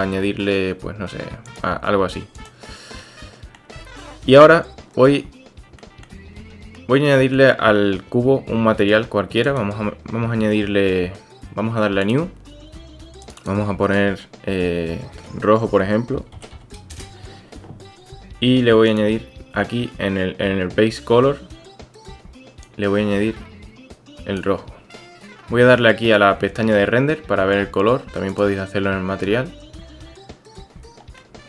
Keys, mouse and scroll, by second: 3.0 click, 5.8 drag, 6.4 Tab, 6.7-7.5 drag, 13.2-17.5 drag, 18.9 click, 25.2 click, 28.3 click, 31.2 click.